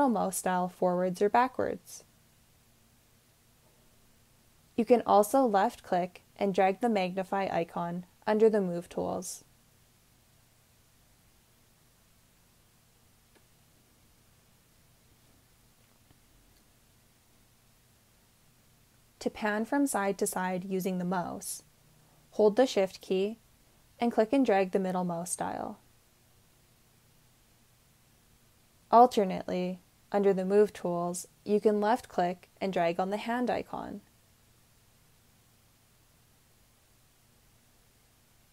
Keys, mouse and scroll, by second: 23.6-29.9 shift+middle drag.